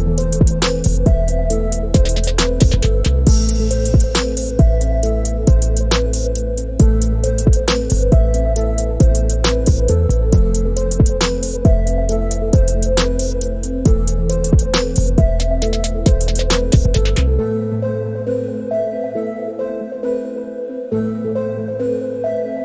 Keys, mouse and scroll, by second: 2.7 click, 3.8-5.0 drag, 5.0 e, 6.7 click, 8.2 alt+middle click, 11.5 e, 15.5 s, 19.5-20.9 drag, 20.9 click.